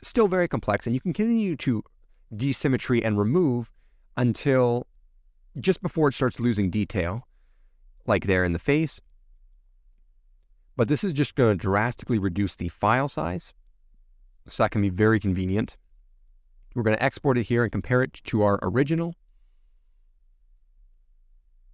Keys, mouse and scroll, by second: 0.5-1.1 scroll up 5, 1.1-1.4 scroll down 1, 1.4-3.5 middle drag, 3.5-4.1 scroll up 2, 4.1-7.5 middle drag, 7.5-8.5 scroll down 2, 8.5-12.2 middle drag, 12.2-12.7 scroll down 4, 12.7-18.7 middle drag, 18.7 click.